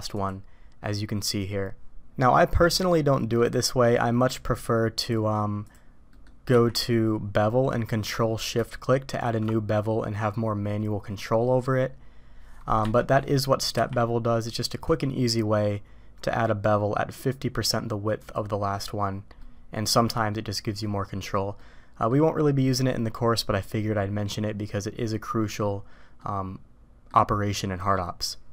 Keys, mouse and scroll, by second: 2.2-3.4 middle drag, 5.6 click, 6.1 middle click, 6.5 q, 8.7 shift+c, 13.7 q, 19.4-20.8 middle drag, 21.6-22.1 middle drag, 26.2 middle click.